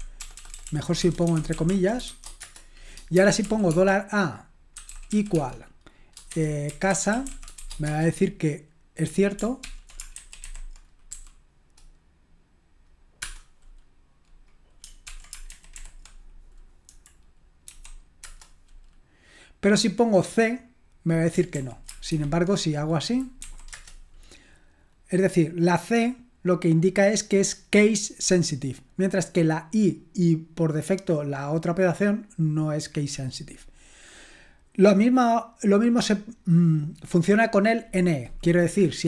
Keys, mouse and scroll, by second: 0.0-8.1 typing, 9.7 ctrl+p, 10.2 alt+b, 10.5 alt+b, 11.2 i, 15.1 ctrl+p, 15.5 alt+b, 15.8 alt+b, 16.9 Delete, 17.7 c, 18.2 Return, 21.6 ctrl+p, 22.1 alt+b, 23.0 Delete, 23.4 c, 23.7 Return.